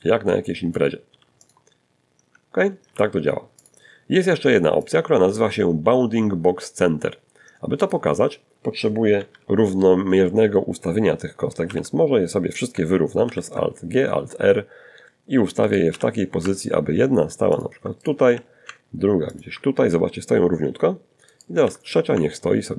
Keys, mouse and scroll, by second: 1.0 r, 1.8 click, 3.0 click, 6.0 click, 7.4 1, 9.9 alt+r, 11.4 alt+g, 13.9 right click, 14.1 g, 15.8 ctrl+click, 16.2 ctrl+right click, 16.5 ctrl+g, 17.5 ctrl+click, 19.5 right click, 19.8 g, 21.2 ctrl+click.